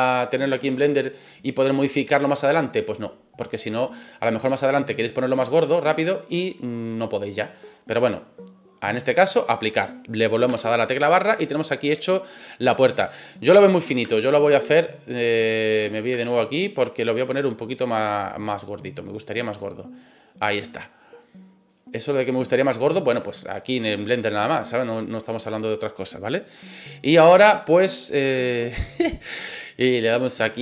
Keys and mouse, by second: 5.1-8.0 drag, 8.9-9.4 drag, 10.5 KP_Divide, 11.1-12.3 middle drag, 14.6 ctrl+z, 15.9 click, 16.2 ctrl+z, 17.4-20.2 drag, 21.6 click, 22.5-22.9 middle drag, 24.3-24.7 middle drag, 25.0 middle click, 27.4 middle click, 28.4-30.5 drag.